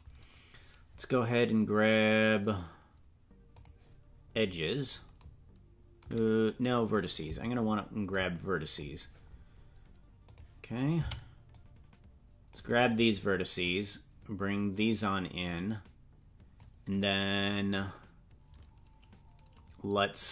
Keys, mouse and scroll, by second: 3.5 click, 4.5 scroll down 1, 6.8 click, 7.7-8.1 scroll up 1, 10.2 click, 10.9 c, 13.6-16.6 drag.